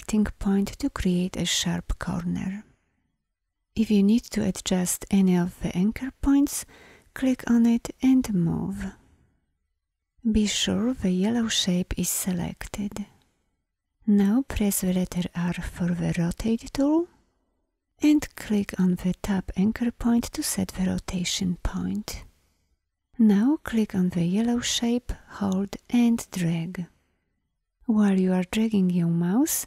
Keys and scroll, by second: 11.0 v, 15.2 r.